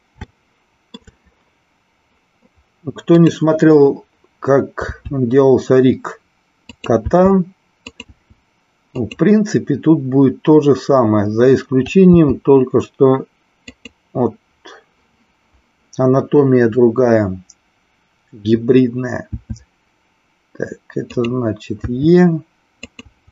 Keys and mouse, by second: 0.3 shift+middle click, 3.0 click, 4.8 e, 6.8 click, 7.0 e, 9.0 click, 12.0 g, 19.3 e, 21.1 click, 21.8 e.